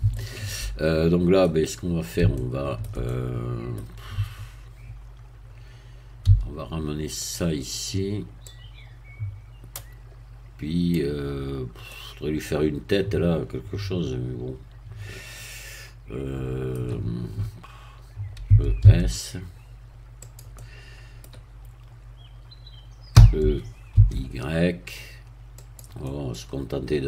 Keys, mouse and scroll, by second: 0.1 shift+middle click, 1.3 middle click, 1.7 scroll down 1, 2.3 shift+middle click, 3.0 shift+middle click, 4.1 Tab, 6.2 a, 7.1 click, 8.4-11.1 drag, 11.3-11.7 scroll up 1, 11.9-18.4 middle drag, 18.4 e, 18.8 s, 20.2-23.1 drag, 20.5-23.1 middle drag, 23.1 e, 23.9 y, 25.5 click, 26.0-27.0 middle drag.